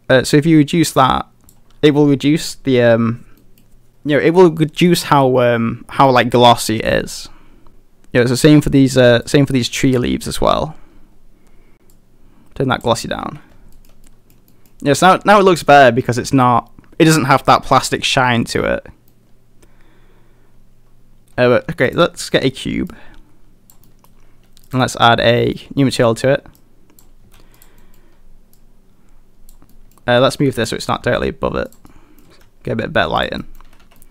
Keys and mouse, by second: 3.4 middle drag, 9.3 click, 12.0 click, 13.0 a, 13.2 a, 13.8 shift+middle click, 14.1 middle drag, 14.5 middle drag, 17.2 middle click, 19.1-21.2 middle drag, 21.2 shift+a, 22.2 middle drag, 22.9 click, 23.9 middle click, 24.7 click, 25.4 middle drag, 25.8 middle drag, 26.6 click, 27.2 s, 27.6 click, 27.8 middle click, 28.5 click, 29.7 middle drag, 30.6 click, 30.9 g, 31.7 click, 31.9 middle click, 32.3 g, 33.2 click, 33.4 middle drag, 33.8 a, 33.9 a, 34.0 middle drag.